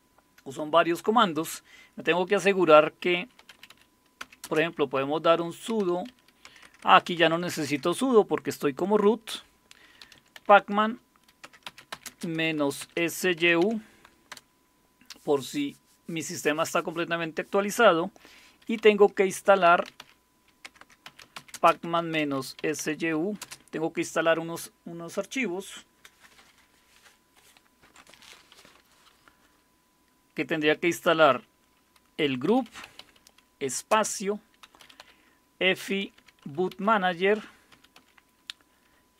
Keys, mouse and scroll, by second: 3.2-7.5 typing, 9.8-14.3 typing, 18.8-23.4 typing, 32.2-38.0 typing.